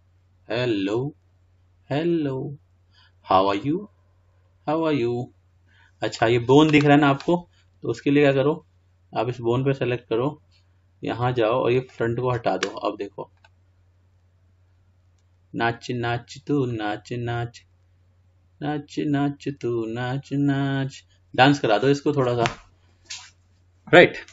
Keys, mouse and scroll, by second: 6.4-13.0 drag.